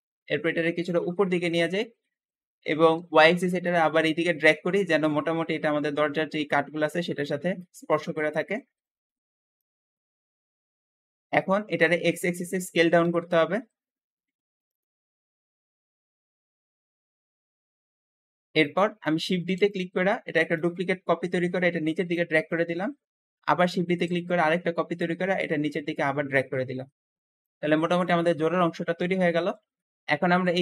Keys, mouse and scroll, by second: 0.7 click, 1.6 middle click, 2.5-3.5 scroll up 2, 3.5 shift+click, 7.0-8.5 shift+middle drag, 8.5 scroll up 1, 8.7 shift+middle click, 9.1-9.5 scroll up 1, 9.5 click, 10.9 scroll down 5, 11.2-12.6 middle drag, 12.6 s, 12.9 x, 13.0 x, 14.8 middle click, 15.3 scroll up 3, 15.4 shift+middle click, 15.7 s, 15.8 x, 16.8 click, 17.6 scroll down 2, 17.8-19.2 shift+middle drag, 19.2 shift+d, 19.4 shift+d, 20.4 shift+click, 22.4 shift+middle click, 22.8 scroll up 2, 23.1 shift+middle click, 23.7 shift+d, 24.8 click, 27.5 scroll down 2, 27.9-29.3 shift+middle drag, 29.3-29.6 scroll up 1, 29.6 shift+middle click, 29.8 Escape.